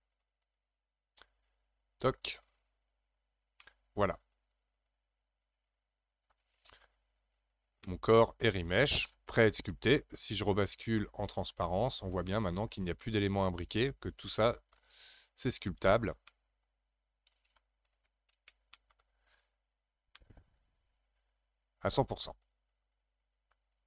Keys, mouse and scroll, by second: 0.4-3.5 drag, 3.6-6.7 middle drag, 7.4-7.8 scroll down 1, 7.8-9.3 middle drag, 9.3-11.6 scroll up 3, 11.6 click, 12.3-15.0 middle drag, 15.0-15.9 scroll up 2, 16.3-17.9 middle drag, 17.9 alt+z, 18.7 alt+middle click, 19.5-20.2 scroll up 9, 20.2-23.2 middle drag, 23.7-23.8 scroll down 12.